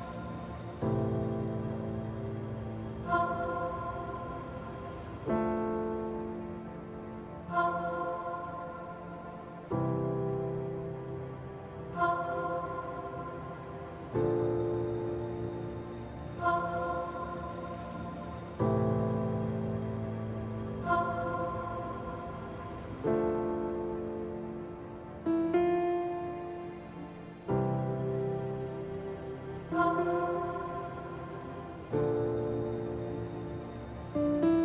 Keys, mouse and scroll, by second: 0.0 n, 0.1-0.6 middle drag, 0.8 s, 1.2 click, 1.4 g, 1.6 z, 1.8 click, 3.6-4.2 middle drag, 4.8 click, 5.2-6.7 drag, 6.0 KP_0, 7.7 KP_1, 9.3 click, 9.9 middle drag, 11.0 KP_7, 12.2 shift+d, 13.7 click, 15.1 KP_3, 15.8 r, 17.1 ctrl+click, 17.5-17.9 middle drag, 18.6 KP_7, 19.2 r, 20.4 ctrl+click, 20.8 KP_1, 21.9 g, 22.2 z, 23.9 click, 24.3 KP_7, 25.1 shift+d, 25.6 x, 26.7 click, 27.1 r, 28.2 ctrl+click, 28.6 KP_0, 29.8 KP_1, 30.5-30.8 middle drag, 34.5 click.